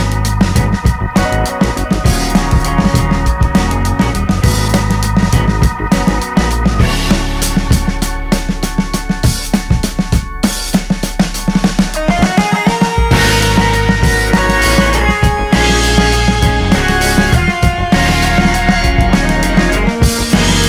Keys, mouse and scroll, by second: 8.6-11.1 middle drag, 11.1 Tab, 11.7 Tab, 14.8-19.1 drag, 19.1 middle click, 19.8 space.